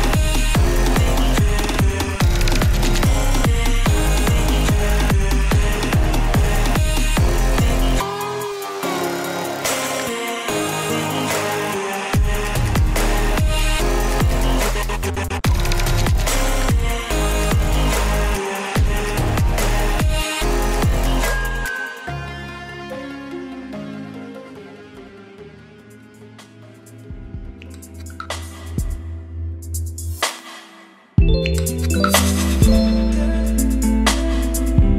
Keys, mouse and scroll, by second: 2.1 s, 2.2 e, 2.3 l, 3.0 Return, 3.4 shift+., 6.9-8.7 drag, 8.7-11.5 typing, 12.4 Return, 12.9 shift+9, 15.4 click, 16.3 Return, 16.7-17.4 typing, 18.6 m, 18.7 a, 18.8 i, 19.0 n, 20.0 shift+9, 20.7 Right, 22.2-26.3 drag, 26.3-27.7 typing, 29.1 click, 30.0 Return, 31.7-34.9 typing.